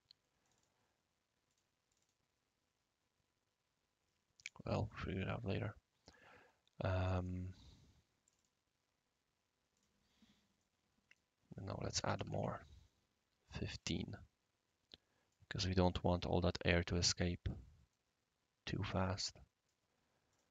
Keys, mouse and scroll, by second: 0.4 click, 1.5 click, 1.9 click, 4.4 click, 4.9-7.3 right drag, 8.2 click, 9.7 click, 10.6 right click, 12.0 typing, 12.3-17.6 Tab, 13.5-15.3 right drag, 15.5-16.0 right drag, 17.6-18.6 middle drag, 18.7-19.7 right drag, 20.3 click.